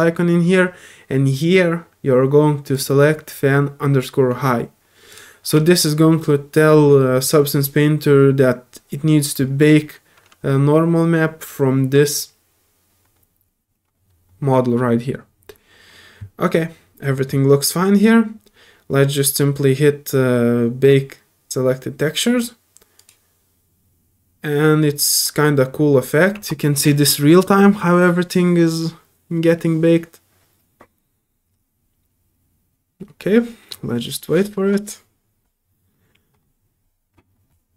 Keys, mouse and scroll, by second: 2.7 click, 5.1 click, 23.0 click, 23.0 typing.